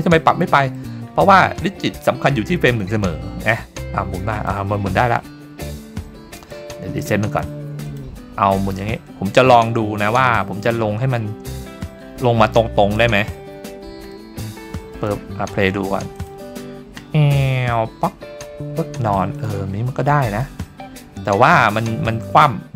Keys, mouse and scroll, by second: 0.4-0.8 middle drag, 3.5-4.6 drag, 6.3-7.9 drag, 8.6-11.2 drag, 11.5 middle drag, 12.1 scroll down 1, 12.5-12.9 shift+middle drag, 13.5-14.1 scroll up 3, 14.1-15.0 shift+middle drag, 16.2 click, 19.4 click, 19.8 scroll up 1, 20.1-20.4 shift+middle drag, 20.5 shift+scroll down 1, 20.7-22.2 scroll up 1, 22.2 scroll up 1, 22.5 scroll down 2.